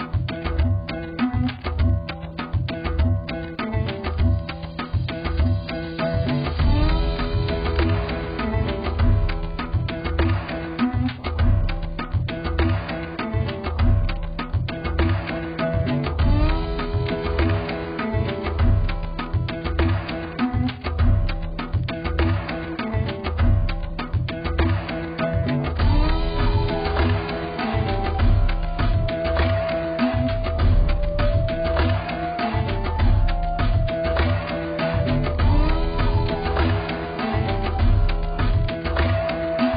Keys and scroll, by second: 9.9 ctrl+d, 34.1 z, 39.0 ctrl+t.